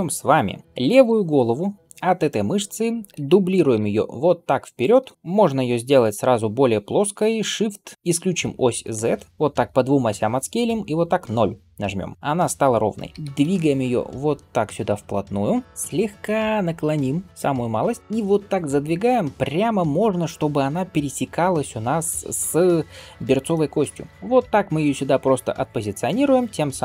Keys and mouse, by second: 0.9 l, 3.4 shift+d, 7.2 s, 13.1 g, 15.6 KP_1, 16.0 r, 17.6 g.